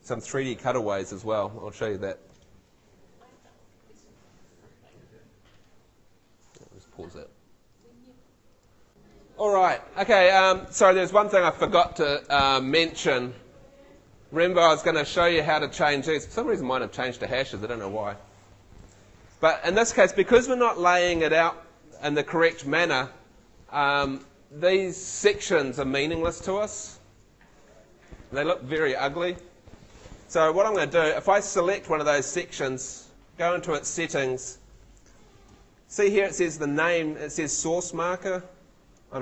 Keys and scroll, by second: 30.8 super+z.